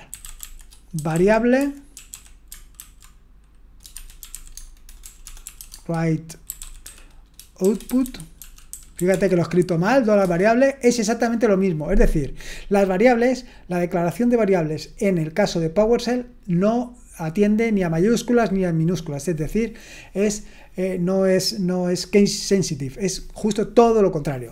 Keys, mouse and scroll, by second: 0.0-2.6 typing, 2.8 ctrl+a, 3.7-10.7 typing.